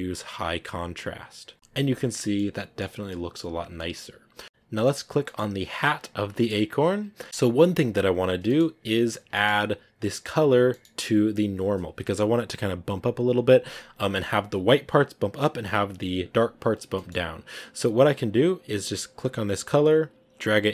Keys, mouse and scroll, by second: 1.5-5.4 middle drag, 5.4-5.8 scroll up 2, 6.8-7.2 scroll down 5, 7.2 scroll up 1, 8.8 scroll up 1, 9.2-11.0 shift+middle drag, 11.0-11.7 scroll up 1, 13.6 scroll up 1, 15.9 scroll up 1, 18.0 scroll down 1, 19.6 click.